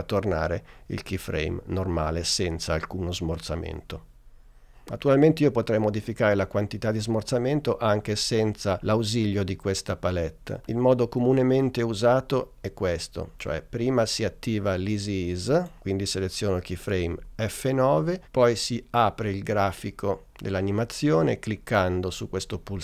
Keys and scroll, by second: 17.2 F9.